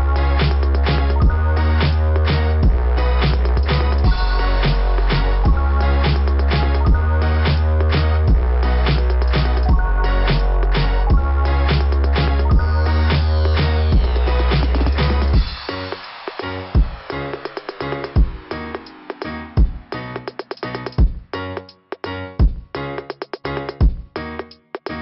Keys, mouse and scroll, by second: 1.8 click, 2.9 click, 4.4 click, 4.5 click, 5.1 click, 5.3 click, 6.1 click, 8.4 click, 8.6 click, 10.2 click, 10.3 click, 11.4 click, 11.6 click, 12.8 click, 13.0 click, 15.6 click, 15.7 click, 15.9 click, 16.0 click, 17.1 click, 17.5 click, 18.6 scroll down 2.